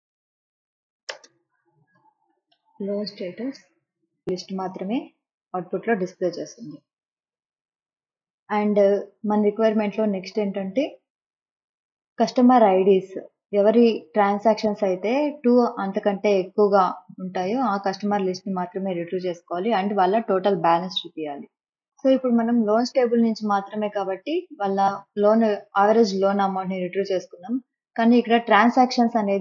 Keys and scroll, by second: 1.0-2.9 typing, 1.3 Left.